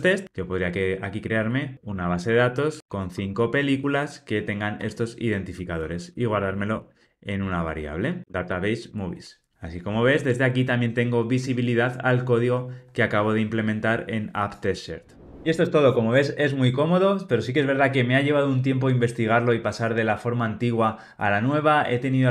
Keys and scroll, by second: 7.4 Return.